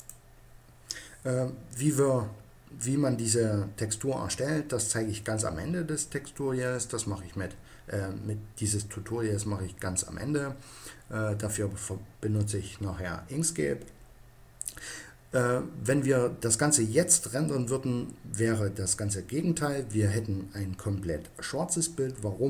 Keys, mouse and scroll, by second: 0.0-1.7 drag.